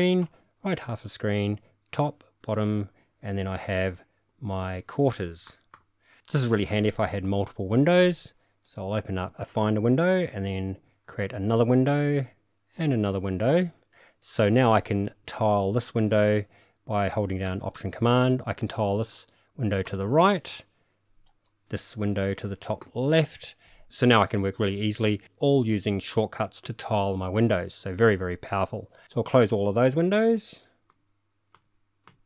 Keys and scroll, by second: 0.2 alt+super+Right, 1.5 alt+super+Up, 2.0 alt+super+Down, 4.3 alt+super+u, 4.6 alt+super+i, 5.4 alt+super+k, 5.7 alt+super+j, 7.2 super+e, 9.0 super+e, 10.7 super+n, 12.8 super+n, 19.8 alt+super+Right, 22.8 alt+super+u, 30.9 super+w, 31.5 super+w, 32.1 super+w.